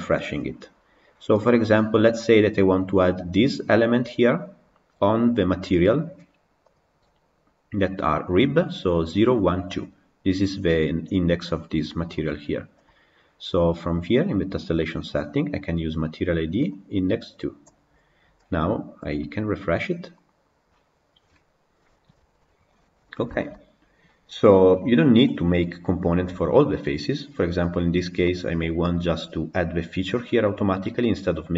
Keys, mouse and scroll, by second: 1.3 click, 5.6 click, 12.2 click, 16.8-21.5 drag, 22.3 middle click, 23.0 click, 23.2-25.0 shift+middle drag, 25.0-26.4 scroll up 2, 26.4 middle click, 27.2 middle click, 27.6-28.1 scroll down 2, 28.1 middle click, 28.7-29.4 scroll up 1, 30.9-31.5 middle drag.